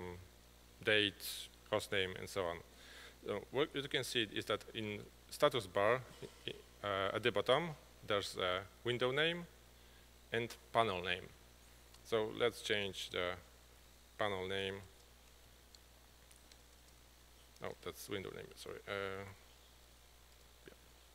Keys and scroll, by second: 14.7 1, 19.7-20.5 typing.